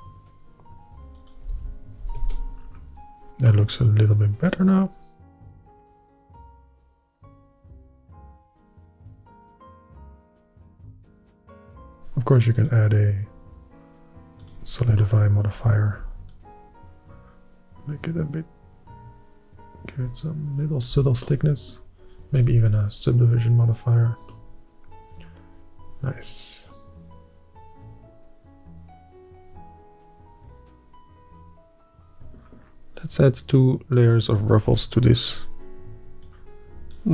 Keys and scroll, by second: 2.3 shift+r, 2.9 Tab, 24.4 ctrl+&, 34.8-37.1 d.